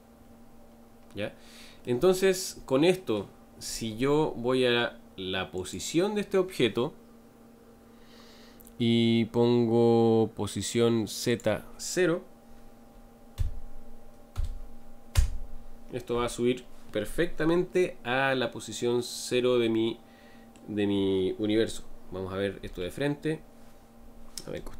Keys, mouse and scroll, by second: 5.7-15.1 drag, 17.7-20.7 middle drag, 22.6 KP_1.